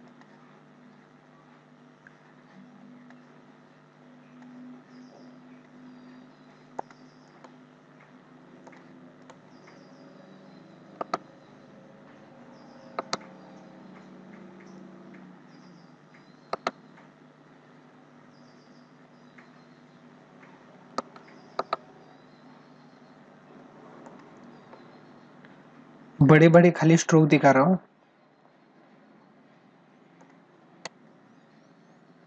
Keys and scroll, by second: 6.5 space, 8.3 space, 10.7 ctrl+alt+z, 12.6 ctrl+alt+z, 16.2 ctrl+alt+z, 20.7 ctrl+alt+z, 23.7 space, 29.9 space.